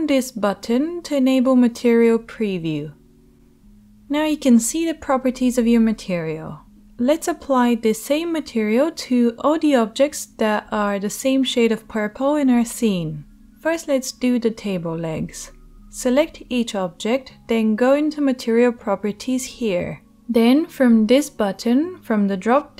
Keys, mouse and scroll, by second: 1.7 click, 1.8-16.6 middle drag, 16.6 click, 16.7-21.6 middle drag, 21.6-22.7 drag.